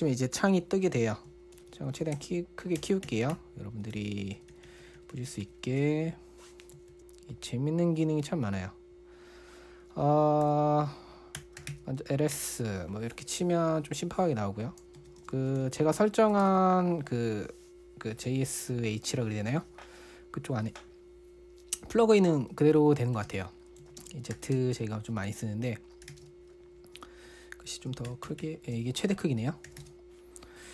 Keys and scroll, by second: 2.0 shift+super+=, 2.1 shift+super+=, 2.6 shift+super+-, 2.7 shift+super+-, 3.2 shift+super+=, 3.5 shift+super+=, 10.9-12.1 typing, 12.8 Return, 15.1-17.3 typing, 23.3-27.0 typing, 28.5 shift+super+=, 28.7 shift+super+=, 29.8-30.7 typing.